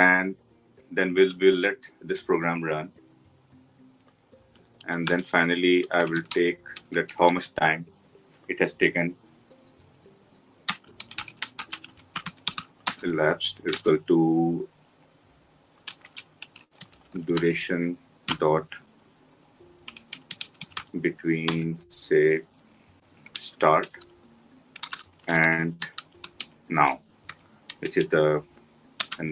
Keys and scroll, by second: 21.5 Return, 28.7 Return.